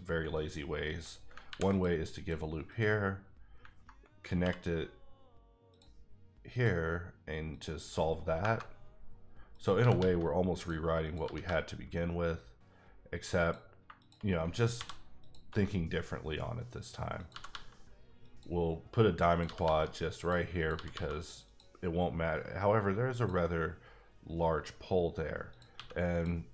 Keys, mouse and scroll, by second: 1.3 ctrl+click, 1.5 ctrl+r, 1.7 click, 2.1 click, 2.7 click, 4.4 k, 5.7 click, 6.5 click, 8.0 click, 8.4 KP_Enter, 9.5 click, 9.8 g, 10.0 g, 10.6 click, 11.0 click, 11.2 g, 11.4 g, 13.3 click, 13.8 shift+click, 14.2 click, 14.7 m, 15.2 click, 16.3-17.1 scroll down 1, 17.1 click, 17.3 g, 17.5 g, 18.2 click, 19.3 click, 19.4 g, 19.6 g, 20.1 click, 20.6 click, 20.7 g, 20.9 g, 21.4 click, 23.2 click, 25.7 x, 26.1 click.